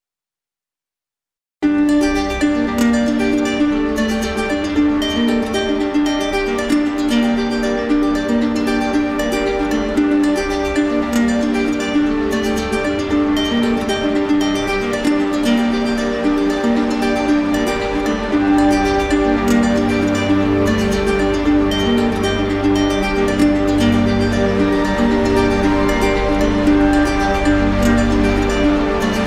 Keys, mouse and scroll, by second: 1.0 click, 6.5 click, 7.7 click, 9.5 click, 10.1 shift+click, 11.1 alt+click, 12.6 ctrl+click, 13.1 ctrl+click, 16.4 click, 17.7 alt+click, 18.8 ctrl+click, 18.9 alt+click, 19.4 ctrl+click, 19.8 ctrl+click, 20.6 ctrl+click, 21.3 ctrl+click, 24.9 click, 25.5 ctrl+click, 26.8 click, 27.5 alt+click, 28.5 click.